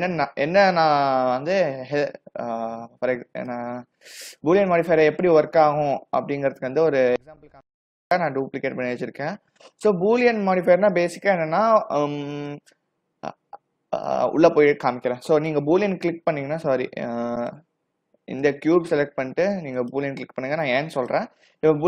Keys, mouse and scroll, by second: 1.4-2.1 typing, 3.9 s, 5.7 g, 8.0 click, 9.4 g, 12.4 click, 17.5 click, 18.5 click, 19.8 click.